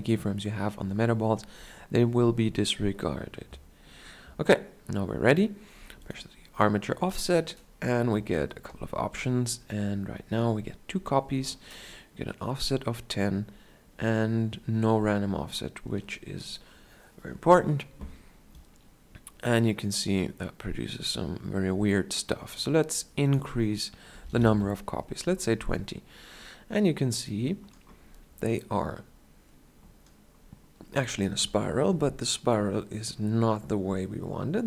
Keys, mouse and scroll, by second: 18.7-20.6 drag, 26.2-28.7 drag, 28.7-29.2 scroll down 1.